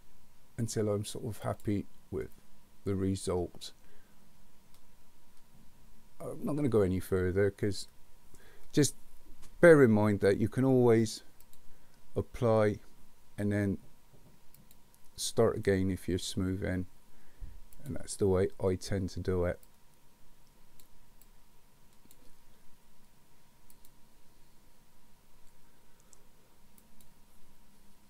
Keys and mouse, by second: 1.5 click, 2.2-8.4 middle drag, 14.6 click, 17.9 click, 19.6-20.8 drag, 21.2 click, 23.7 click, 26.9 click.